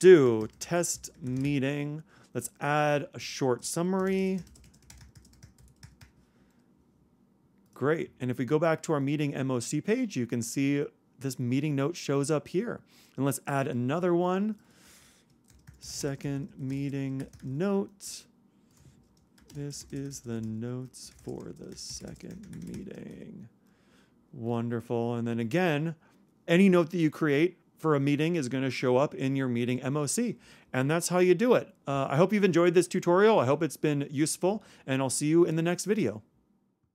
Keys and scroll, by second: 0.0-1.5 typing, 3.7-4.5 typing, 15.5-17.8 typing, 19.1-20.0 typing, 22.7-23.6 typing.